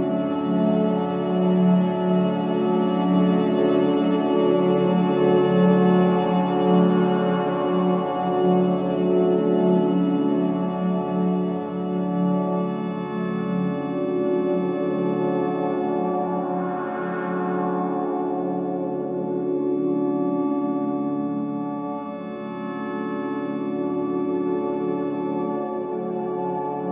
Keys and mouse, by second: 9.8-12.8 drag, 14.4 click, 16.3-17.7 drag.